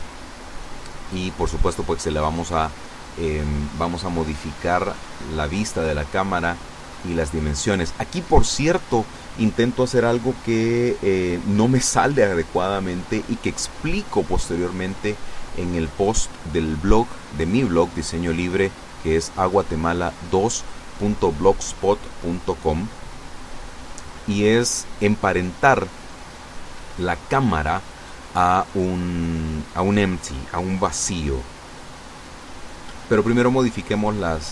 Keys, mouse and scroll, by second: 0.2 KP_0, 2.0 right click, 3.0 g, 4.3 click, 5.1 r, 6.9 click, 8.1 g, 9.5 click, 10.6-12.4 middle drag, 12.4-13.1 scroll up 1, 13.1-14.2 scroll up 1, 14.2-14.7 scroll up 1, 14.7 right click, 15.2-16.8 middle drag, 16.8 scroll up 1, 16.9 middle click, 17.4 scroll up 1, 18.2 middle click, 19.6 middle click, 19.7 scroll down 1, 23.5 scroll down 1, 26.5 ctrl+alt+KP_0, 28.5 right click, 31.0 click, 33.5 click.